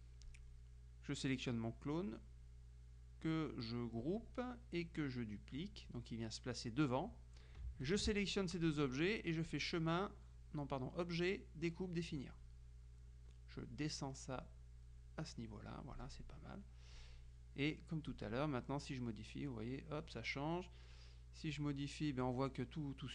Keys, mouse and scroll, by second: 0.3 click, 4.1 click, 5.7 click, 7.9 shift+click, 9.6-13.1 drag, 14.5 click, 17.1 click, 18.2 click, 18.9-20.6 drag, 21.6 click.